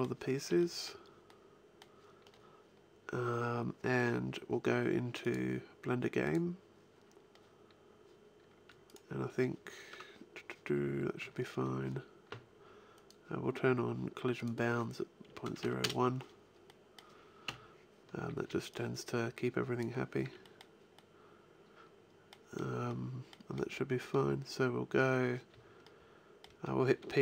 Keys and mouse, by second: 0.3 b, 1.2-3.5 middle drag, 4.4 middle click, 5.1-8.7 drag, 6.9-10.5 middle drag, 7.1-8.7 right drag, 12.8-16.1 middle drag, 16.5 middle click, 17.3 KP_1, 18.0 a, 18.3 b, 20.1 b, 21.2 middle click, 21.4 middle click, 21.6-26.7 middle drag, 27.1 p.